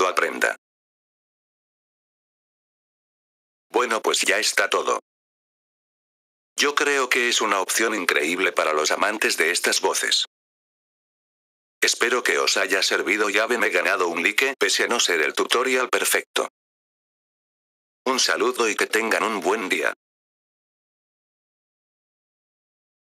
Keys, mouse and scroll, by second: 1.5 F4, 3.6-5.4 drag, 10.8 click, 13.3 click.